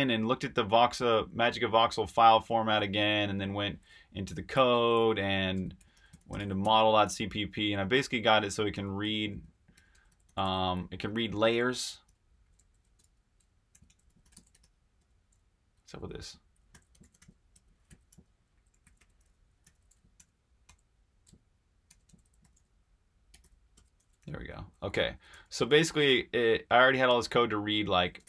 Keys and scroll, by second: 2.8 super+Tab, 4.5-14.5 typing, 16.5-25.4 typing, 19.6 super+h, 27.3 typing.